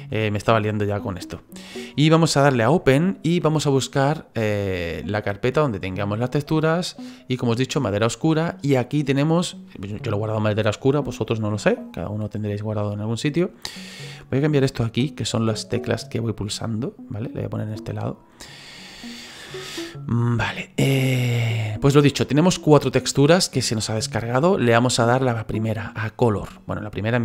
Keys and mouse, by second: 1.0 click, 2.7 click, 6.4 click, 7.7 click.